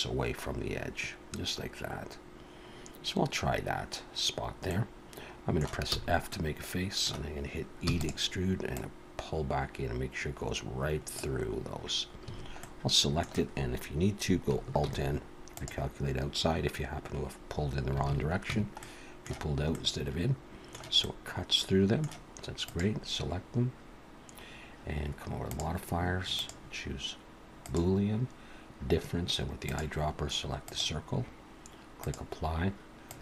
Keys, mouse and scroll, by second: 1.3 scroll down 2, 2.6 scroll down 1, 4.7 middle click, 5.9 f, 6.3 middle click, 7.9 e, 8.8 click, 12.2 a, 12.6 middle click, 14.8 alt+n, 16.9-17.2 scroll down 2, 18.0 alt+a, 18.5 Tab, 18.8 middle click, 19.7 middle click, 21.0 middle click, 22.7 click, 25.5 click, 26.4 click, 29.7 click, 32.0 click, 33.1 click.